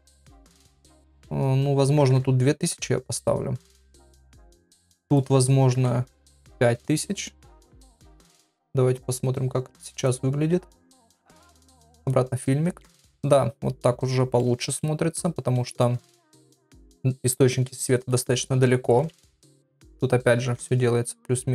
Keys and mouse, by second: 2.1 KP_0, 4.0 click, 5.0-8.1 drag, 5.9 KP_0, 8.9 click, 10.0-12.1 drag, 14.3 middle click, 15.8 shift+middle click, 17.2 middle click, 18.9 KP_1, 20.2 g.